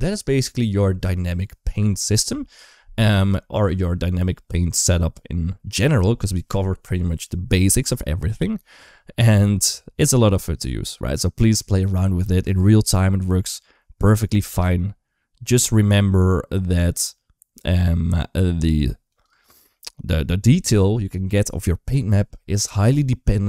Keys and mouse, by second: 12.3 space, 14.5 g, 19.1 space, 19.6 shift+middle drag.